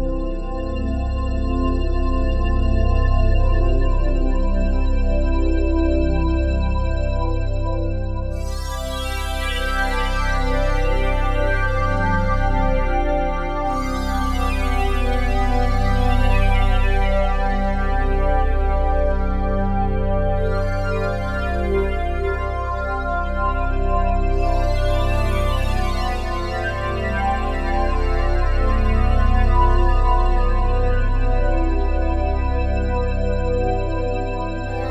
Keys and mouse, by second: 0.3 alt+shift+click, 1.4 click, 3.8 click, 6.7 click, 7.4 click, 8.3 click, 8.6 click, 9.2 click, 9.5 click, 10.4 click, 11.4 ctrl+alt+click, 12.6 alt+click, 13.2 alt+click, 14.5 click, 14.8 click, 15.9 ctrl+alt+click, 16.6 alt+click, 17.8 click, 18.7 shift+click, 19.2 shift+click, 22.8 click, 23.4 click, 25.3 Delete, 27.1 ctrl+alt+click, 29.5 click, 29.7 click, 32.8 shift+b, 33.0 shift+g, 33.2 Return, 34.4 click.